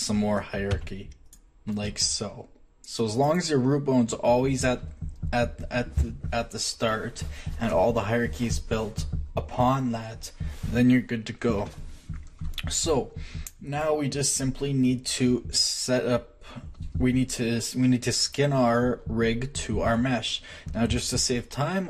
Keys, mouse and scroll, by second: 1.2 click, 3.1-9.7 drag, 12.9 click, 13.1 middle click, 14.9 middle click, 19.9 Tab, 20.9 z.